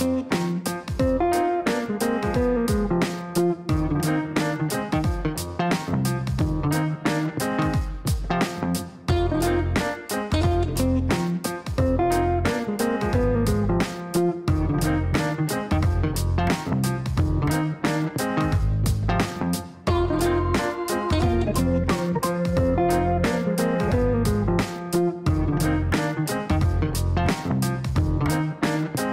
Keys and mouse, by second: 0.3 click, 1.4 click, 2.3 right click, 3.5 click, 4.1 click, 4.5 right click, 5.3 click, 6.2 click, 7.5 click, 12.4 click, 13.2 click, 13.6 click, 14.8 click, 15.8 click, 20.0-20.8 typing, 20.9 Down, 23.8-24.9 typing, 26.1 Down, 26.4 Down, 26.7 Up, 27.1 Return, 27.7-29.1 typing, 27.9 KP_Add.